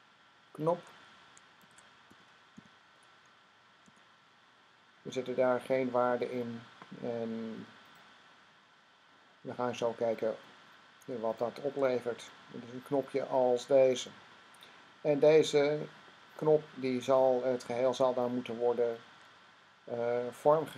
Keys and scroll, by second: 1.2-3.7 typing.